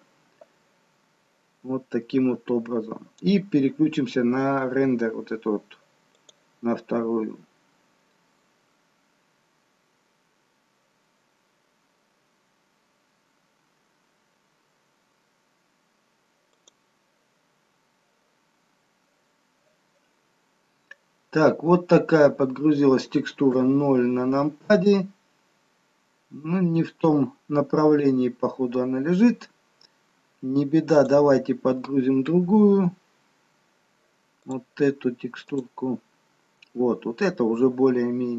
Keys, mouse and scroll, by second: 7.7 click, 20.8-21.9 scroll up 3, 21.9-22.6 scroll down 1, 23.7 scroll down 2, 23.7 KP_0, 31.1 click, 37.2-38.1 scroll up 2, 38.1-38.3 scroll down 1.